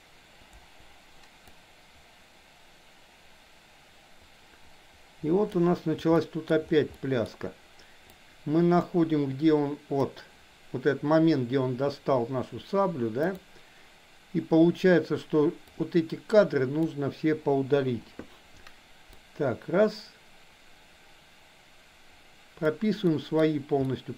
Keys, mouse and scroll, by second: 0.5 Delete, 1.5-5.5 drag, 6.0-6.5 shift+middle drag, 6.9-7.3 middle drag, 8.2-10.2 drag, 13.2 click, 15.7 drag, 15.9-16.9 drag, 19.2-22.7 drag, 23.0 middle click, 23.9-24.1 middle drag.